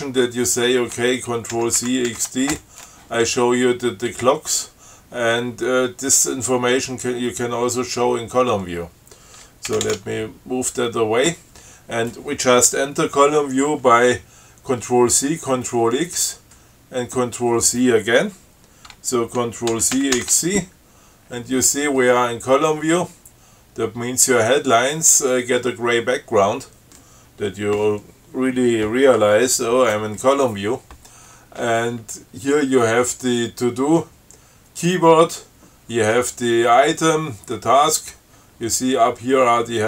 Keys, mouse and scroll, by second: 0.7 click, 1.8 ctrl+c, 2.0 ctrl+x, 2.3 ctrl+d, 9.9 ctrl+c, 19.9 ctrl+c, 20.2 ctrl+x, 20.4 ctrl+c.